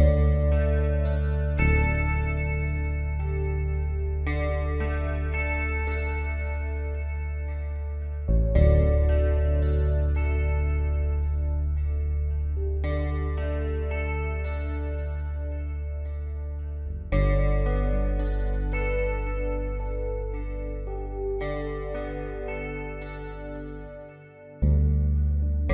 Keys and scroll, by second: 11.7 x.